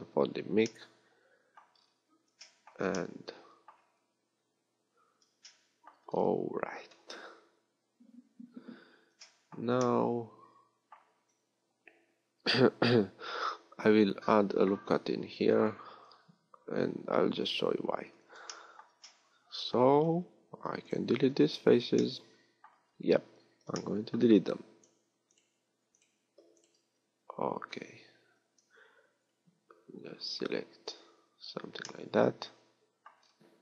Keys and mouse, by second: 14.7 ctrl+r, 27.9 a, 33.3 middle click.